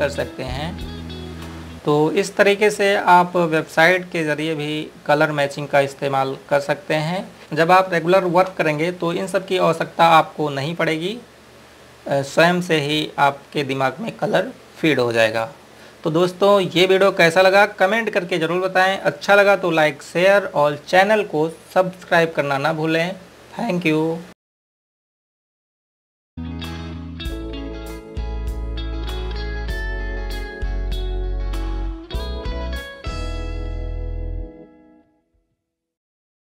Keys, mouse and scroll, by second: 1.7 scroll down 1, 3.5 scroll up 1, 10.7 click, 12.6-13.6 scroll up 1, 17.4-18.0 scroll down 1, 18.0 click, 18.9-20.7 scroll up 1.